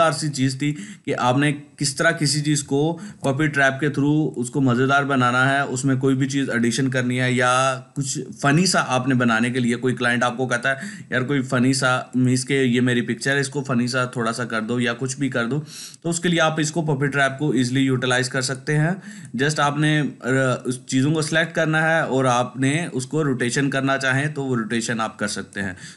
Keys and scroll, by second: 3.0 ctrl+d.